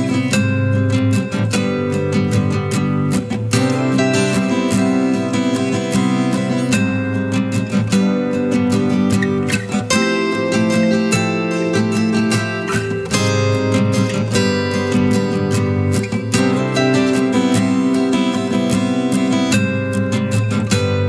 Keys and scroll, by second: 8.7 ctrl+space, 9.2 ctrl+space, 9.3 ctrl+space, 9.4 ctrl+space, 9.4 ctrl+space, 9.6 ctrl+space, 10.2-14.7 ctrl+space.